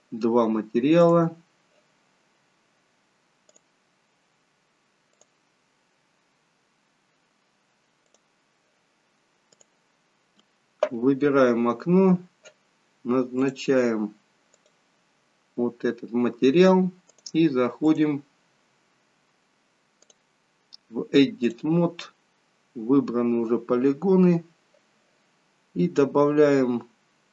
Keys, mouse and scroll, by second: 13.5 click, 18.6 click, 22.4-22.9 scroll up 2, 22.9 scroll down 2, 23.2-23.5 scroll down 1.